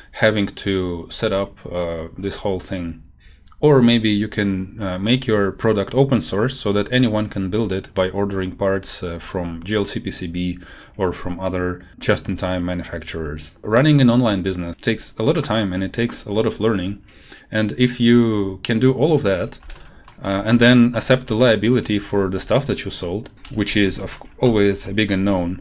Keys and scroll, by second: 19.1 Left, 19.4 Down, 19.9 ctrl+shift+Right, 21.2 shift+Left, 23.3 ctrl+Right, 24.1 ctrl+shift+Right, 24.8 shift+Left.